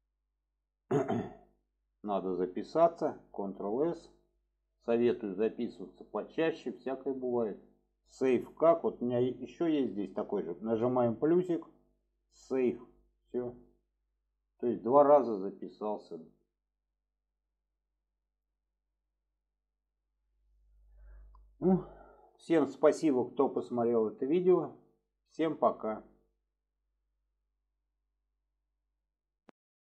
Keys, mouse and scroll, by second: 3.3 ctrl+s, 5.1-7.7 drag, 14.4-16.7 drag.